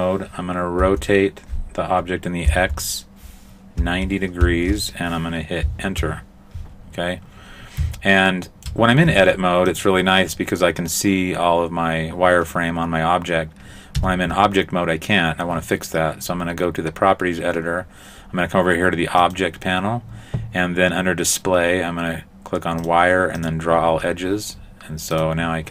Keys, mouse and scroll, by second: 0.8 r, 8.3 shift+middle click, 9.1 Tab, 14.0 Tab, 19.2 click, 22.8 click, 23.4 click, 25.2 click.